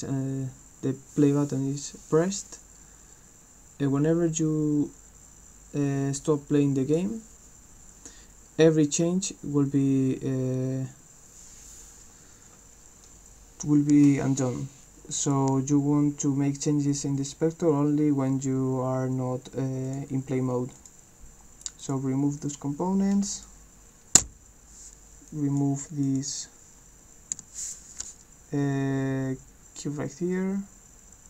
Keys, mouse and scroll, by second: 2.4-6.9 drag, 15.2 click, 19.9 click, 20.8 click, 21.8 click, 23.3 click, 25.3 click, 26.0 click.